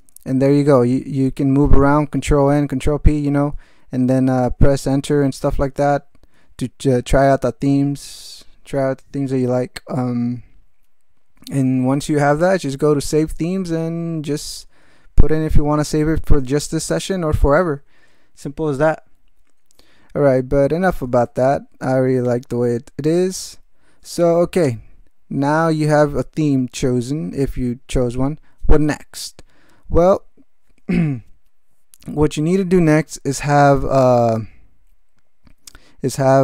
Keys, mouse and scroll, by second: 0.9 n, 2.9 p, 3.2 n, 4.7 Return, 5.5 p, 5.9 Return, 6.8 n, 12.6 alt+shift+,, 12.8 alt+shift+Caps_Lock, 13.0 alt+shift+n, 20.8-21.7 typing, 22.2 Return.